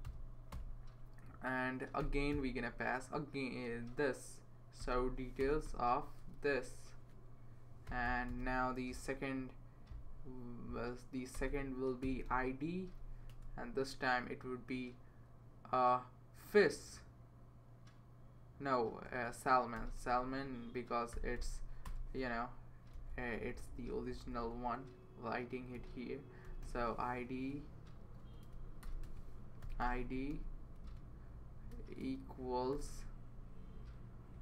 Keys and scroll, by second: 0.0-0.5 typing, 1.7-2.5 typing, 4.8 typing, 5.4 Return, 6.2 typing, 7.0 Left, 7.6-8.9 typing, 11.3-12.0 typing, 13.3 Return, 13.5 typing, 19.5-21.6 typing, 21.9 Return, 22.7 Down, 23.0 Left, 23.4-24.2 typing, 26.2-30.8 typing, 32.0 BackSpace, 32.7 =.